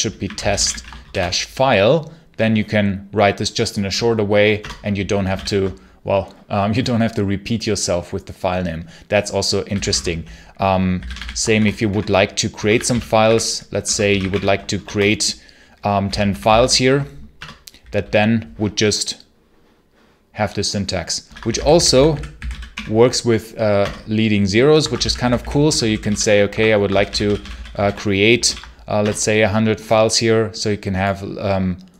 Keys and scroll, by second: 0.0-1.4 typing, 4.4 Return, 5.2 ctrl+k, 9.3-16.9 typing, 17.2 Return, 21.1-23.1 typing, 23.6 Return, 24.5-28.2 typing, 26.6 Escape, 28.3 ctrl+l, 28.8 Return.